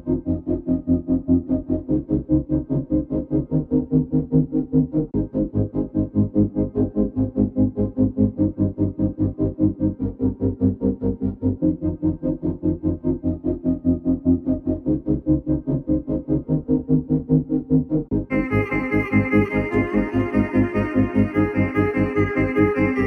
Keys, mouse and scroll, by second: 2.0 click, 3.0 alt+click, 4.2 shift+click, 7.6 shift+click, 9.3 right click, 9.8 click, 10.6 alt+scroll up 1, 12.1 alt+scroll down 1, 13.5 click, 13.8 alt+scroll down 1, 14.4 double click, 14.7 click, 16.1 alt+click, 17.7 ctrl+z, 19.0 shift+Up, 19.2 shift+Up, 19.3 shift+Up, 19.5 shift+Up, 20.0 shift+Up, 21.2 shift+Down, 22.6 shift+Up.